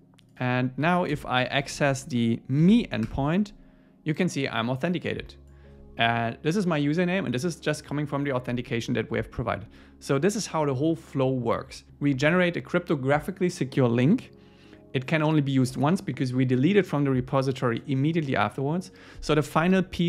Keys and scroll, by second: 3.1 Return.